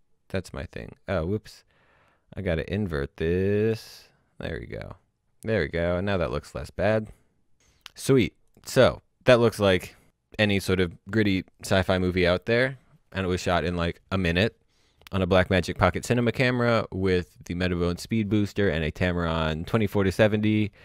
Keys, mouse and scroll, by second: 3.6 click, 5.6 click, 7.3-7.8 scroll up 1, 7.8 scroll down 1, 8.1 click.